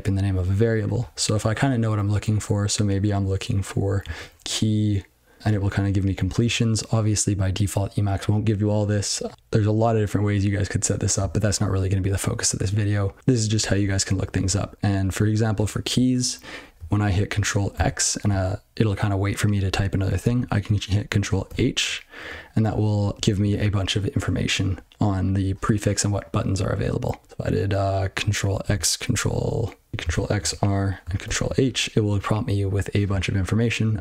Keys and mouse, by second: 13.8 ctrl+g, 15.0 click, 23.1 ctrl+g.